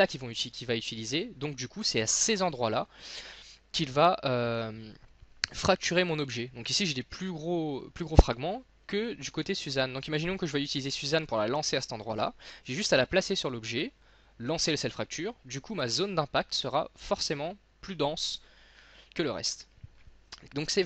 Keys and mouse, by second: 3.6-5.6 middle drag, 6.4-13.0 middle drag, 15.9-17.8 middle drag.